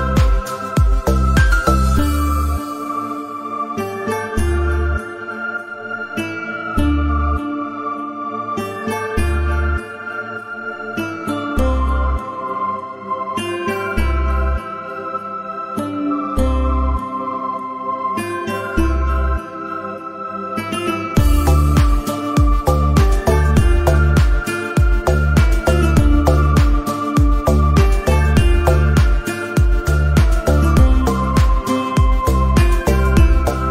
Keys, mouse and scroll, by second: 0.8-1.1 scroll down 1, 1.1 middle click, 4.6 shift+middle click, 6.3 3, 6.9 middle click, 7.5 scroll down 2, 7.6 shift+middle click, 7.8 click, 7.9 middle click, 8.8 ctrl+click, 8.9 middle click, 10.0 middle click, 10.4 click, 10.5 middle click, 10.9-13.0 ctrl+drag, 13.0 middle click, 13.2-14.1 scroll up 1, 14.4 middle click, 14.9 alt+click, 15.1 u, 15.3 middle click, 15.8-16.6 scroll down 1, 16.6-18.0 scroll down 1, 18.0 shift+middle click, 18.2 click, 18.5 middle click, 18.7 Tab, 18.8 middle click, 19.0-19.4 scroll down 2, 19.4 shift+middle click, 19.5 scroll up 1, 19.6 middle click, 19.7 click, 20.5 u, 24.7 middle click, 24.9 click, 25.2 u, 25.7 middle click, 32.9 scroll up 3, 32.9 shift+middle click, 33.0 click, 33.3 shift+middle click.